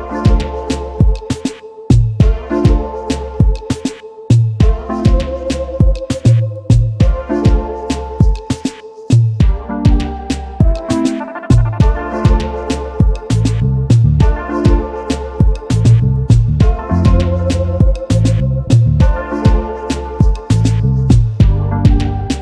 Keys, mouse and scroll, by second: 0.4 ctrl+g, 1.2 space, 1.3 double click, 2.4 alt+scroll up 1, 3.0 double click, 3.6 alt+scroll down 1, 4.0 space, 4.1 double click, 5.7 alt+shift+click, 6.6 double click, 7.9 m, 13.7 v, 15.5 ctrl+shift+], 16.2 ctrl+shift+], 16.7 shift+space, 16.7 double click, 18.0-18.8 typing, 19.3 alt+scroll down 1, 20.7 double click, 21.1-21.7 alt+scroll up 3, 21.4 alt+click, 21.7 alt+scroll down 1, 22.0 alt+click, 22.2 double click.